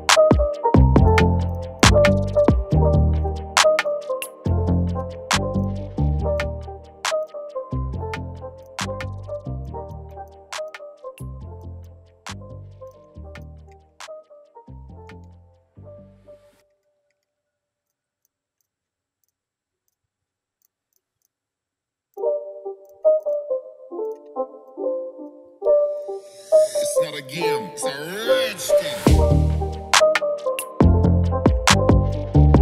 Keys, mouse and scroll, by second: 1.8 Delete, 4.4 shift+click, 13.6-14.2 scroll up 2, 14.4-14.8 alt+scroll down 3, 15.1-15.5 alt+scroll up 2, 15.5-16.0 scroll down 1, 16.5-16.8 ctrl+scroll down 1, 17.1 scroll up 1, 17.3 scroll down 1, 18.2 ctrl+z, 23.2 double click, 25.9 right click, 28.2 shift+click, 30.0 shift+click.